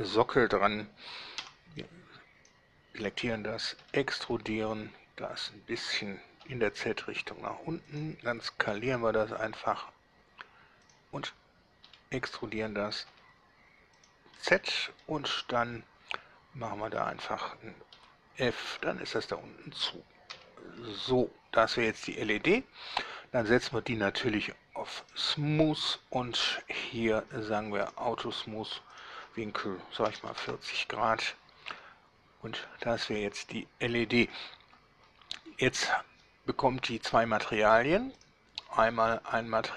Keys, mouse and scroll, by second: 1.5 b, 1.9-2.7 drag, 3.9 e, 6.5 z, 7.9 click, 8.8 s, 10.9 drag, 11.9 e, 13.2 z, 14.1 drag, 14.5-15.3 middle drag, 18.0 f, 18.8 Tab, 20.5 z, 20.9-22.1 middle drag, 25.1 click, 27.9 click, 29.0 click, 30.1 4, 30.3 0, 30.5 Return, 32.9-34.6 middle drag, 38.3 click.